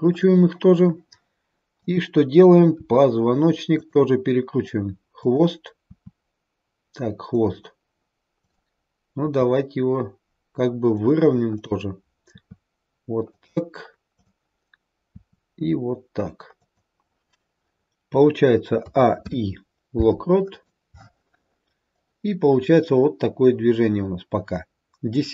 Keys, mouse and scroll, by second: 2.6 click, 2.6 r, 5.1 click, 8.9 click, 9.1 r, 11.4 click, 14.0 click, 15.0 r, 18.8 a, 19.1 i, 21.9 click.